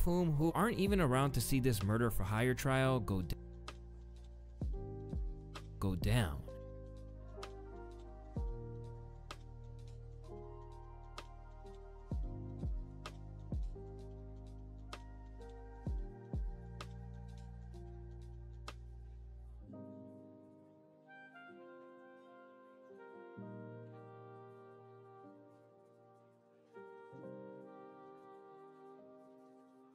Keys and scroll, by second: 2.9 space, 5.5 space, 6.2 space, 17.5 ctrl+shift+c, 24.4 ctrl+alt+y, 25.5 ctrl+space, 26.8 Return, 28.4 typing.